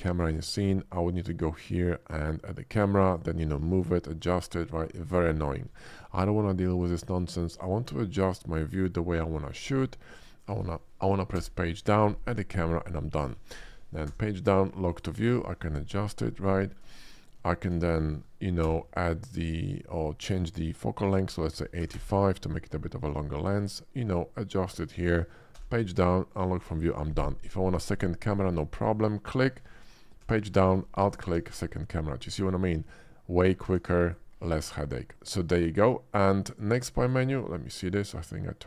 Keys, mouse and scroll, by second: 0.2 shift+a, 3.1 click, 3.8 f, 4.2 g, 5.0 click, 5.7 x, 6.0 middle click, 6.5 shift+middle click, 7.1 shift+middle click, 7.4 shift+middle click, 7.6-8.9 shift+middle drag, 9.3 shift+middle click, 9.9 shift+middle click, 10.2 shift+middle click, 11.3 Page_Down, 12.3 click, 14.9 click, 15.3 click, 15.6 middle click, 16.5 shift+middle drag, 16.9 ctrl+scroll up 2, 17.4 shift+middle click, 18.6 Page_Down, 19.5 click, 21.5 8, 21.8 5, 21.9 Return, 23.3 middle drag, 23.8-24.7 shift+middle drag, 25.5 Page_Down, 26.3 click, 26.6 middle click, 27.4-27.7 middle drag, 28.4 middle click, 28.7 click, 30.2 Page_Down, 31.1 alt+click, 31.4 alt+middle drag, 33.6 a, 33.9 x, 34.0 click, 34.5-34.9 middle drag, 35.1 middle click, 37.0 click, 37.7 click.